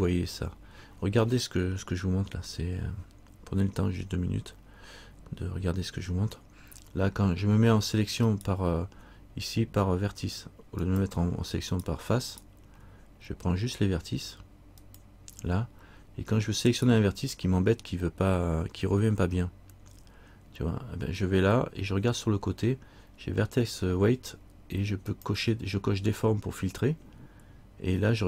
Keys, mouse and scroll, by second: 8.5 right click, 11.0 click, 11.9 right click, 15.0 click, 16.9 right click, 25.3 click.